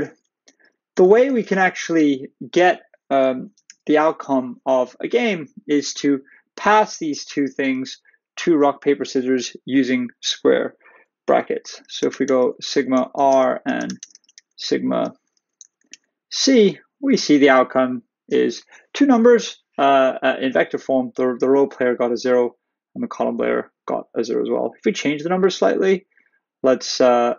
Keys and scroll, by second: 0.2 Return, 1.4 shift+], 15.9 shift+Return.